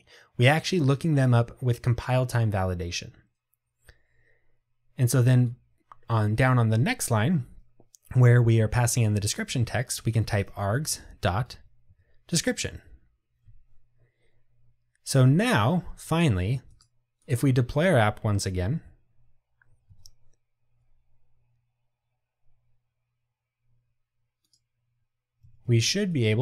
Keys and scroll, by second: 12.0 Tab, 17.3 ctrl+r.